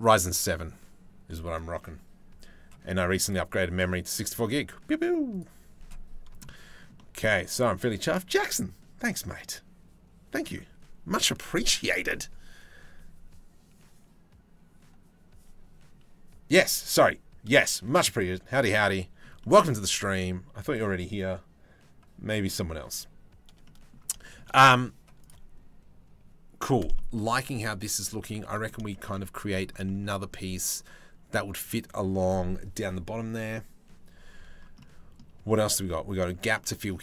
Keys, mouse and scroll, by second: 6.1 middle click, 6.6 middle click, 18.6 middle click, 19.0 shift+middle click, 19.6-23.5 shift+middle drag, 23.8 shift+middle click, 24.1 middle click, 24.8 middle click, 26.6 shift+middle click, 27.2 middle click, 27.6 middle click, 28.5 shift+middle click, 28.7 middle click, 29.4 shift+middle click, 29.7 middle click, 34.4 middle click, 35.1 shift+middle click, 36.1 middle click.